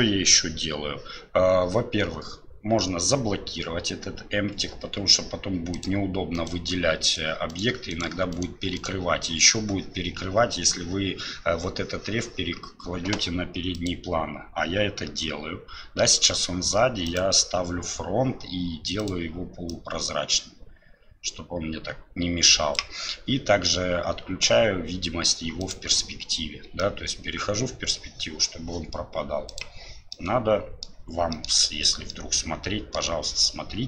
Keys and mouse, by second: 5.7 click, 7.1 right click, 7.5 right click, 7.9 right click, 8.3 right click, 8.8 right click, 17.1-26.8 drag, 26.8-27.9 middle drag, 29.5 click, 30.1-30.9 middle drag, 31.3 middle click, 32.1-33.0 middle drag.